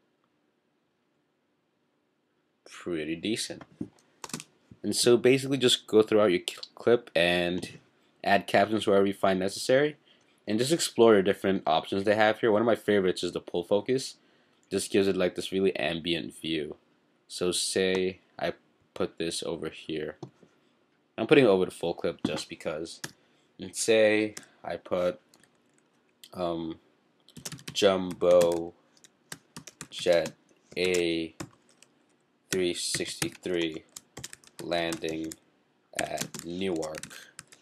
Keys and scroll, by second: 27.1-37.6 typing.